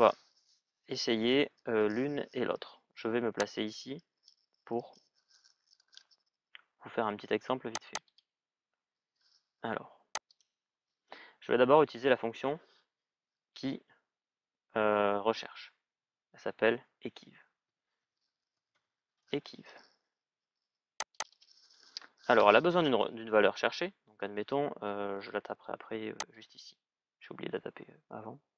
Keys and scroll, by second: 17.4 shift+e, 17.8 shift+q, 18.3 shift+u.